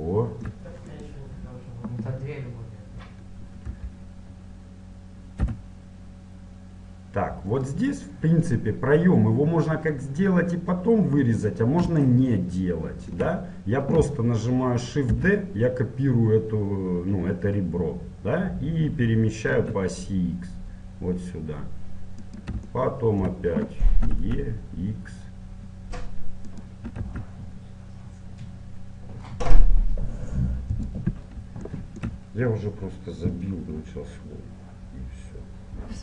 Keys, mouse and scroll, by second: 0.1 middle click, 1.0-2.8 right drag, 3.5 e, 12.1-14.1 middle drag, 15.2 shift+d, 22.7-24.7 middle drag, 24.1 e, 26.9 e, 31.7-33.7 middle drag.